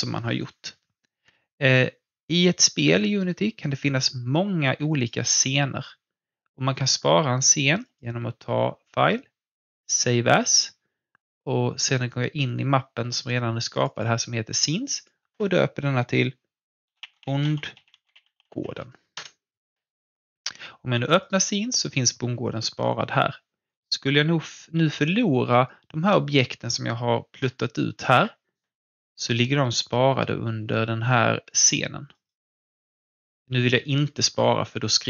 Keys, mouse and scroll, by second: 4.9 alt+Num_Lock, 4.9 alt+click, 5.3 alt+scroll down 1, 7.8 click, 13.7 click, 16.5-19.1 typing, 19.2 Return, 20.9 click, 23.1-23.6 scroll down 1, 23.6-28.5 drag, 29.8 click, 32.0 click.